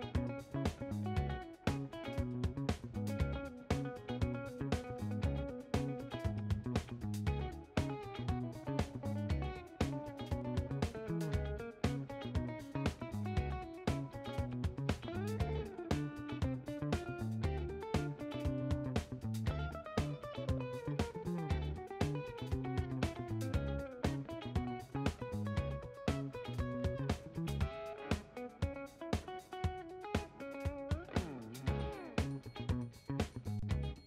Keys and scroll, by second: 4.7 ctrl+a, 15.8 b, 22.0 b.